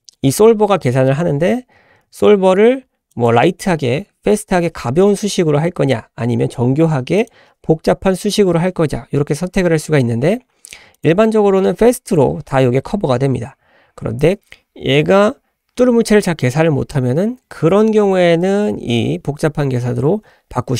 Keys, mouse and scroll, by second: 3.2-6.2 drag, 7.5 click, 11.0-14.0 drag.